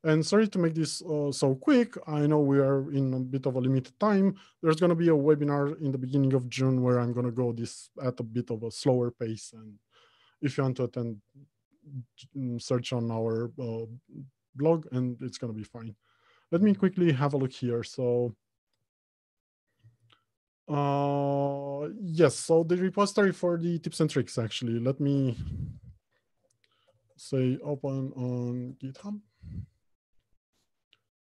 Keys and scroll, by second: 25.7 ctrl+shift+a.